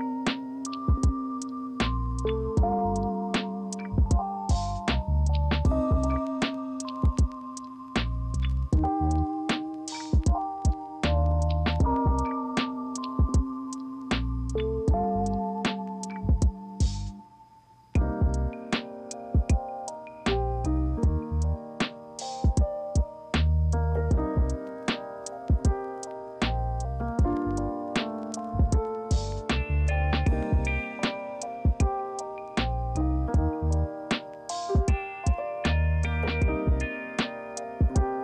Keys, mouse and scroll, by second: 1.4 ctrl+c, 1.6 ctrl+f, 21.5 ctrl+z, 30.1 ctrl+z.